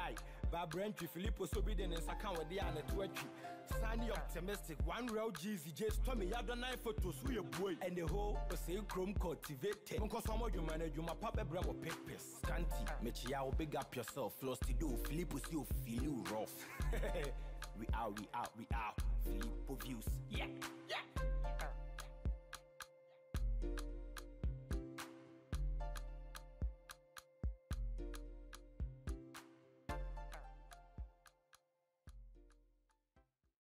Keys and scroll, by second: 1.1 alt+Delete.